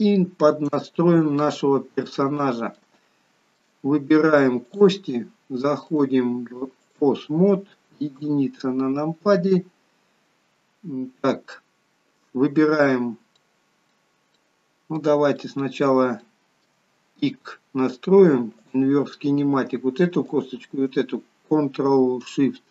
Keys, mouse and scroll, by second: 0.9 shift+middle click, 1.7 scroll up 4, 2.2 middle click, 3.0 shift+middle click, 4.7 click, 5.9 click, 8.2 KP_1, 9.3 scroll up 3, 9.6-10.5 scroll down 2, 13.5 middle click, 14.2 scroll down 1, 14.4 middle click, 15.4 middle click, 16.3 shift+middle click, 16.4 shift+middle click, 17.0-17.5 scroll up 3, 17.8 scroll down 1, 18.6 click, 20.4 shift+click.